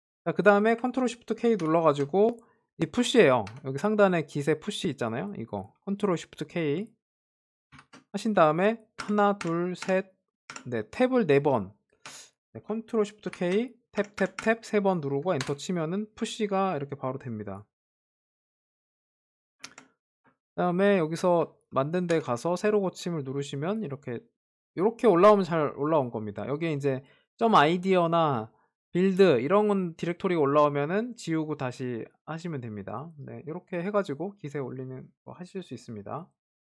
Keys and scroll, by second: 1.9 ctrl+shift+k, 8.2 ctrl+shift+k, 13.8 ctrl+shift+k.